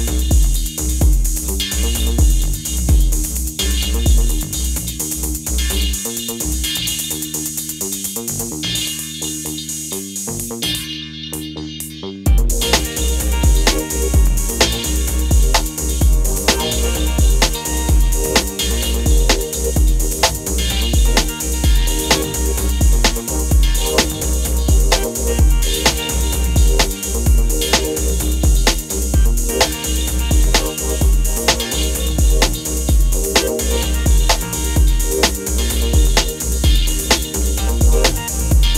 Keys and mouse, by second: 0.6 click, 1.6 click, 2.4 click, 2.6 click, 3.0 click, 4.5 click, 4.9 click, 5.4 click, 7.8 click, 11.8 ctrl+s, 11.9-14.4 typing, 12.8 drag, 15.7 s, 16.2 click, 16.7 ctrl+p, 17.1 r, 17.1 z, 17.8 ctrl+s, 18.2 click, 18.6 g, 18.7 y, 19.3 ctrl+s, 19.6 click, 19.7 click, 20.0 click, 20.5 ctrl+s, 20.6 g, 20.6 y, 21.7 right click, 21.9-29.3 typing, 22.3 ctrl+s, 28.4 ctrl+s, 28.6 click, 29.0 alt+v, 30.7 z, 31.0 click, 31.8 z, 32.1 shift+click, 32.9 click, 33.4 click, 34.7 click, 35.5 ctrl+s, 35.5 space, 35.9 space, 37.9 Tab, 38.1 click, 38.6 a.